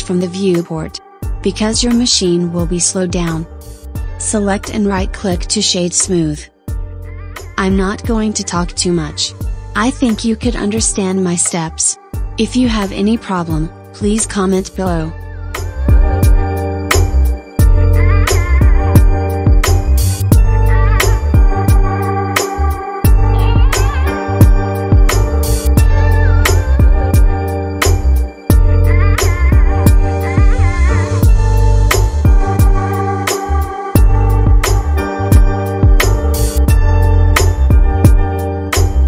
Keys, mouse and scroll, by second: 1.0 click, 2.9-3.7 drag, 4.2 right click, 12.5-15.5 scroll down 1, 19.0-20.2 scroll down 1, 20.2-21.9 scroll down 3, 21.9-22.5 scroll down 1, 22.5-23.3 scroll up 4, 24.1 click, 28.9 click, 30.0 click, 34.8 click.